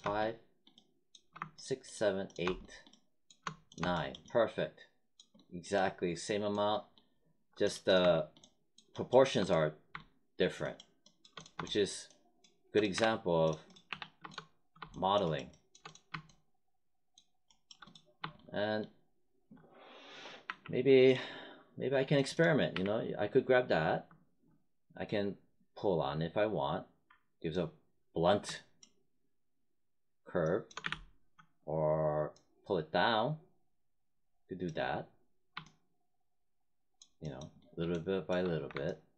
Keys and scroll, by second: 12.9 3, 20.4 w, 22.7 w, 30.8 z, 38.4 1.